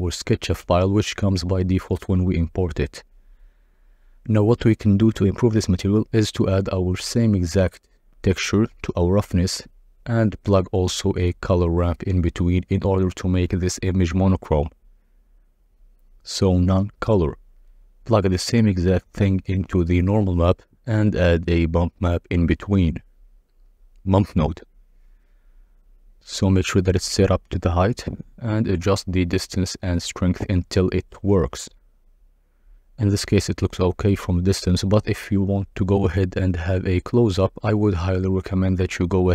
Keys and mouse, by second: 0.9-3.5 drag, 4.0 n, 4.5-5.6 drag, 6.5 x, 6.9 click, 8.3-9.5 drag, 10.3 KP_Divide, 12.4 shift+a, 15.1 drag, 15.8 ctrl+shift+click, 16.8 click, 18.8 click, 20.1-21.3 drag, 21.6 shift+a, 24.5-24.8 drag, 26.3 click, 28.5-30.5 shift+drag, 33.2 click, 34.4 shift+click, 36.8 click, 38.5 KP_Divide.